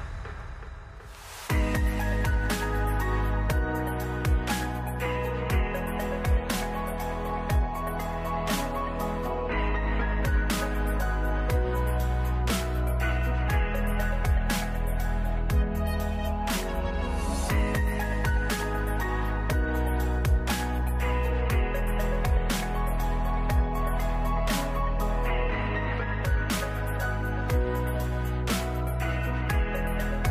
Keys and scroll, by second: 12.0 ctrl+d, 26.1 ctrl+s.